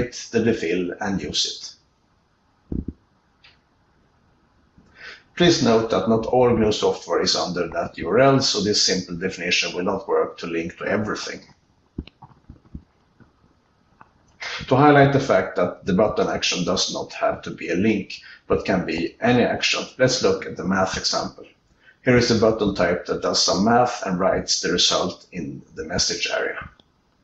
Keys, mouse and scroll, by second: 0.8 ctrl+e, 2.1 ctrl+e, 4.2 ctrl+n, 4.6-5.6 ctrl+b, 6.2 ctrl+b, 7.2 alt+Return, 9.0 q, 10.0-11.3 ctrl+f, 12.4 alt+Return, 14.0 ctrl+v, 15.7 q.